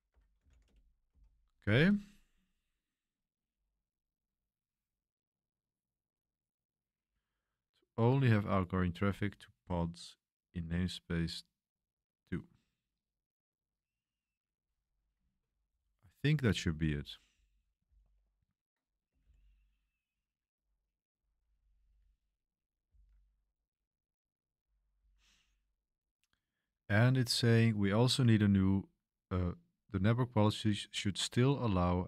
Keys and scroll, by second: 0.0-1.1 typing, 0.1 Escape, 2.6-3.3 typing, 17.0-17.8 typing, 19.1-24.9 typing, 25.2 ctrl+j, 27.3 typing.